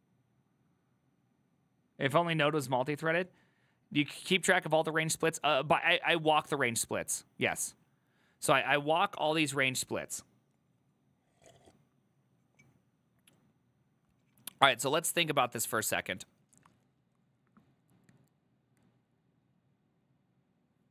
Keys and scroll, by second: 6.3-7.4 typing.